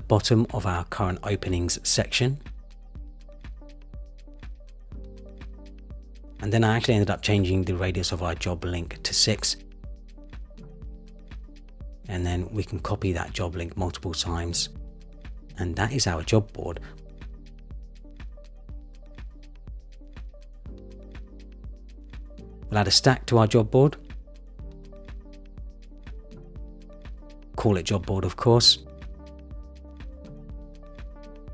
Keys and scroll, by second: 1.5 shift+Up, 2.4 shift+Up, 5.2 shift+Up, 10.7 Up, 12.3 super+c, 12.5 super+v, 13.3 super+v, 30.7 Return.